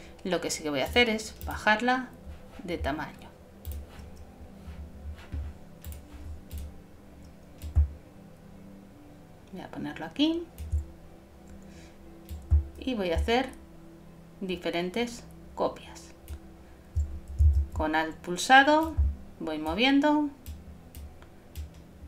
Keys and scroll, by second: 17.5 shift+super+z, 18.0 super+z.